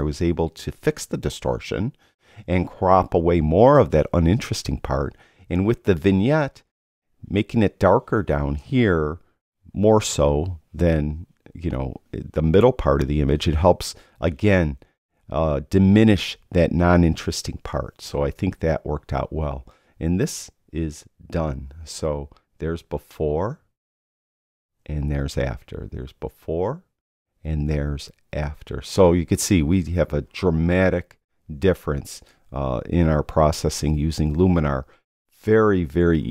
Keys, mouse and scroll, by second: 22.9 \, 26.0 \, 27.0 \.